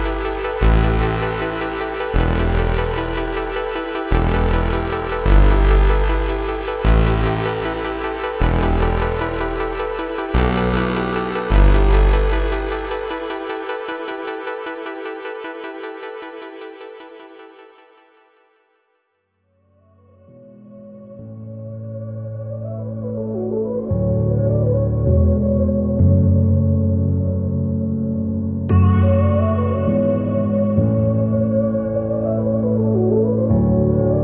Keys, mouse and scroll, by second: 1.4-1.8 scroll up 3, 1.9 alt+click, 2.6 scroll down 4, 3.0 alt+middle click, 3.6 click, 4.1 click, 5.3 click, 5.7-7.6 drag, 8.3 click, 8.7 click, 9.0-9.5 alt+scroll down 3, 9.1 alt+middle click, 9.7 alt+middle click, 10.0 scroll down 2, 10.4 alt+middle click, 10.8 scroll up 2, 11.3-11.8 alt+drag, 12.1 alt+middle click, 14.2 click, 15.7 middle click, 15.7 scroll up 2, 16.3 click, 16.7 middle click, 16.7 scroll up 1, 17.2 click, 19.4 click, 21.1-21.6 scroll down 3, 22.4 click, 23.5 click, 25.0-25.3 drag, 25.7-26.9 drag, 28.9 click, 30.9 scroll up 2, 33.5 ctrl+g.